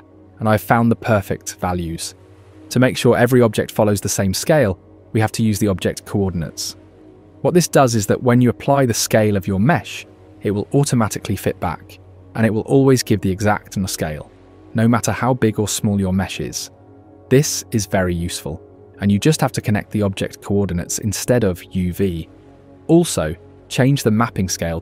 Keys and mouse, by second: 17.2 ctrl+a, 20.0 click, 21.3-22.9 drag.